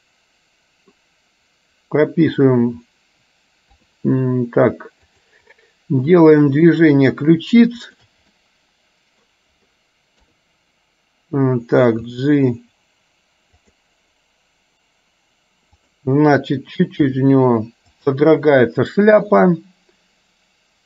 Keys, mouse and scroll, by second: 3.7 KP_3, 5.2 click, 5.6-6.8 middle drag, 8.0 shift+click, 8.5 middle click, 10.3 KP_3, 12.1 g, 17.2 r.